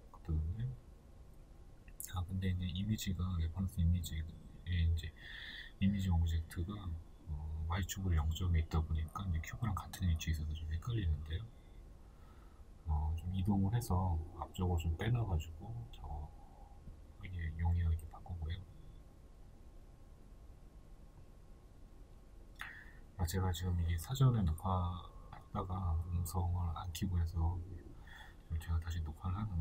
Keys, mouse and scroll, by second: 0.2 right click, 1.3 right click, 1.7 right click, 2.1 scroll up 1, 3.4-4.8 shift+middle drag, 4.8 right drag, 5.1 scroll down 1, 5.8-7.7 middle drag, 6.8 g, 7.7 click, 7.9-9.1 middle drag, 8.8 KP_0, 11.8-13.9 shift+middle drag, 12.0 scroll up 1, 12.8 scroll up 2, 13.1-13.9 scroll down 2, 13.9 right click, 14.4 b, 15.0 right click, 15.3-18.8 shift+middle drag, 18.8 right click, 21.9 shift+middle click, 22.1 scroll up 1, 26.6 shift+middle click, 28.0 click, 28.2 shift+middle click, 29.0 right click.